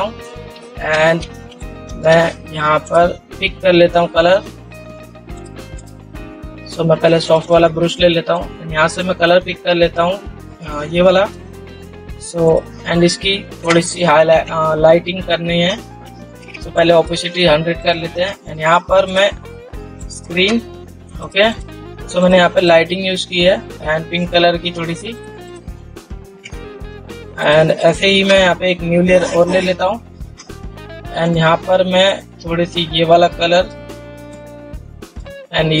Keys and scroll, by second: 1.2 ctrl++, 16.8 ctrl+z, 26.8 ctrl+0.